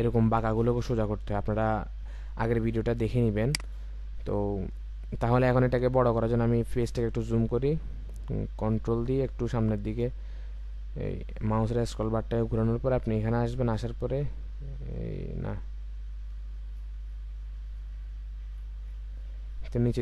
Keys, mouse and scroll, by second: 4.0-5.4 scroll up 1, 7.9-8.8 ctrl+scroll up 1, 11.4-12.1 ctrl+scroll up 1, 12.5-13.8 scroll down 1, 14.0-14.4 ctrl+scroll up 1, 15.1-15.6 ctrl+scroll down 1, 16.1-16.7 ctrl+scroll up 1, 16.7-17.1 scroll up 1, 18.5-19.2 scroll down 1.